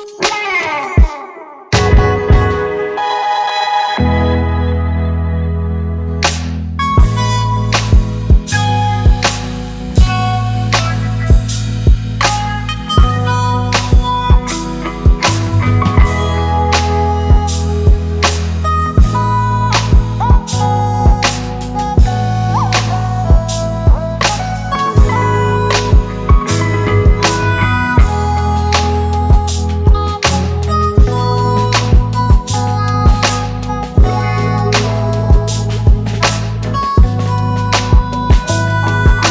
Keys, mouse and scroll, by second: 0.2 space, 1.1 ctrl+click, 2.0 ctrl+click, 3.1 ctrl+click, 4.3 ctrl+click, 5.3 space, 6.2 ctrl+click, 7.3 ctrl+click, 8.5 ctrl+click, 9.8 double click, 9.8 ctrl+click, 10.3 space, 11.7 ctrl+click, 13.7 ctrl+click, 14.6 ctrl+click, 14.8 space, 15.4 ctrl+click, 16.4 ctrl+click, 17.4 ctrl+click, 17.9 ctrl+click, 18.5 ctrl+click, 18.8 space, 19.6 ctrl+click, 20.1 ctrl+click, 20.7 ctrl+click, 20.7 space, 21.5 ctrl+click, 22.0 ctrl+click, 22.5 ctrl+click, 22.9 space, 23.7 ctrl+-, 23.8 ctrl+-, 24.4 ctrl+-, 25.2 alt+scroll up 1, 29.5 ctrl+Return, 34.5 right click.